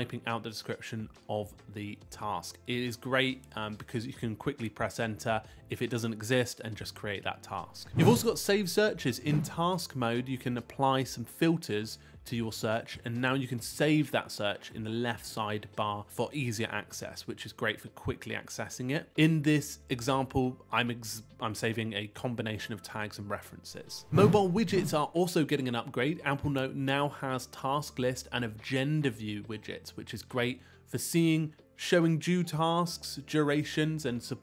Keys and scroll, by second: 0.2 Return, 6.1 Return.